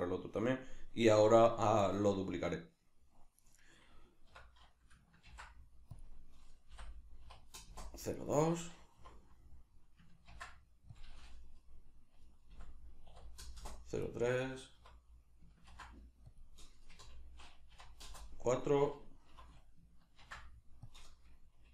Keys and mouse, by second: 1.9 right click, 3.5 right click, 4.3 F2, 8.2 right click, 9.0 F2, 14.1 right click, 14.8 F2, 18.5 right click, 19.3 F2.